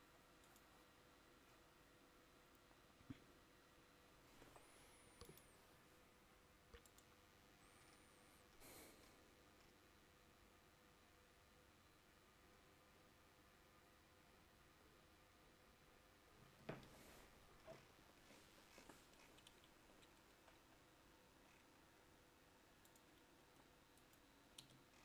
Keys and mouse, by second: 1.1-10.4 drag, 24.8 Tab.